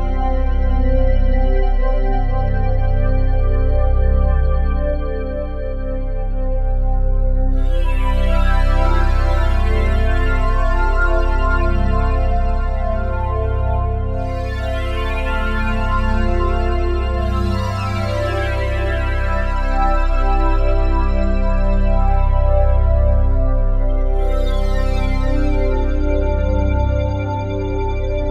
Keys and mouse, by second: 0.2 y, 2.2 click, 2.9 i, 3.7 click, 4.6 click, 5.4-7.0 drag, 5.5 typing, 6.8 typing, 7.2 click, 8.4 typing, 8.9-10.2 drag, 10.2 drag, 10.6-12.3 drag, 12.6-13.5 typing, 13.1-15.9 drag, 15.5 typing, 19.0 space, 19.8 ctrl+s, 21.5-22.7 alt+shift+drag, 23.0-25.7 alt+shift+drag, 27.0-28.0 ctrl+alt+drag, 28.1 ctrl+s.